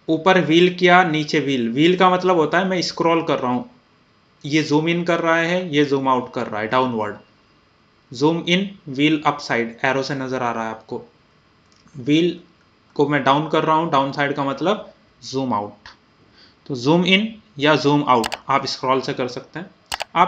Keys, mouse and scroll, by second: 0.8 scroll, 1.0 scroll down 1, 1.9 scroll up 1, 2.1 typing, 2.9 scroll down 1, 3.8 scroll up 1, 5.7-6.1 scroll down 1, 6.7 scroll down 1, 6.7 typing, 7.9-8.5 scroll up 1, 11.7 scroll down 1, 11.7 typing, 16.9 scroll up 1, 16.9 typing, 18.0 scroll down 1.